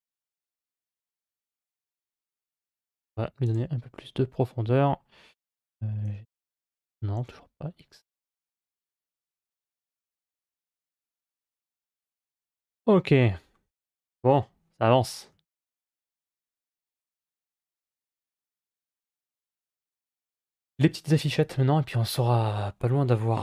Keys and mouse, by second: 2.6 middle click, 5.4 g, 8.6-9.6 middle drag, 11.2 middle click, 11.6 Tab, 15.1-18.2 middle drag, 18.5 ctrl+s.